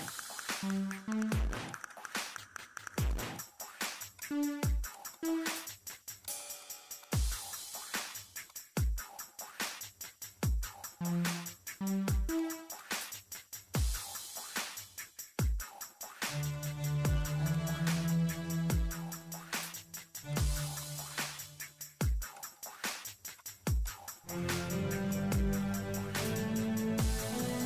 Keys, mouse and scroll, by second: 0.4-1.3 typing, 1.6 click, 2.2 middle click, 2.7 middle click, 3.1 click, 4.1-5.2 typing, 4.9 click, 8.4 click, 10.1 scroll up 1, 10.5 scroll down 1, 11.0 ctrl+scroll up 1, 12.0 click, 12.8 click, 12.8-16.4 typing, 16.5 click, 16.7 middle click, 17.2 click, 19.0-19.8 typing, 20.1 click, 20.8 click, 21.1 right click, 21.3 click, 21.9 7, 22.1 Return, 22.3 click, 22.8 middle click, 23.4 click, 24.0 middle click, 25.1 click, 25.4 middle click, 25.9-26.8 typing, 25.9 click, 26.9 Return, 27.3 click, 27.5 middle click.